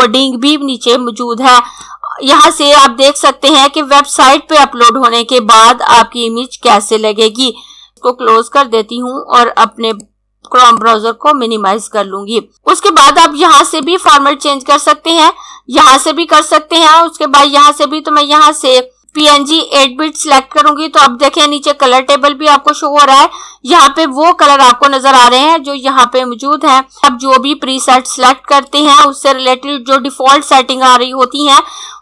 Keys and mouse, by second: 1.6 click, 19.3 click, 28.8 click.